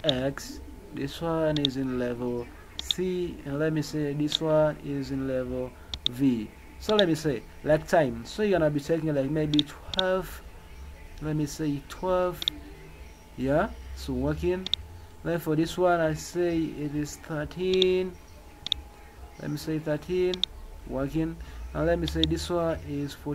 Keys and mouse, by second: 1.5 click, 2.7 click, 2.9 click, 4.3 click, 5.9 click, 9.5 click, 9.9 click, 12.5 click, 14.6 click, 17.7 click, 18.6 click, 20.3 click, 22.0 click.